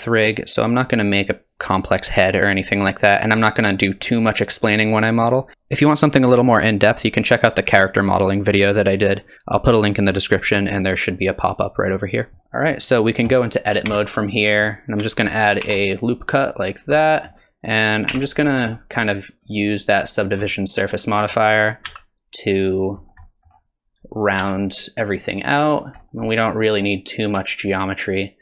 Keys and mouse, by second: 12.3 middle drag, 13.9 Tab, 14.3 middle click, 15.6 ctrl+r, 17.0 click, 18.1 3, 18.4 click, 20.5 click, 21.9 s, 23.3 click, 24.4 s, 26.3-28.4 middle drag.